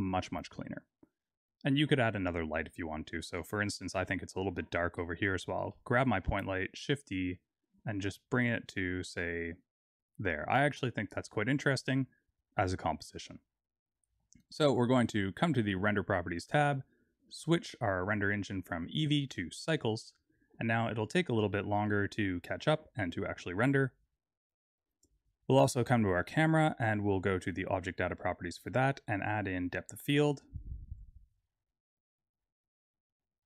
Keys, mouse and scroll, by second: 3.2 click, 6.6 shift+d, 16.0 click, 18.5 click, 25.9 click, 27.4 click, 29.5 click.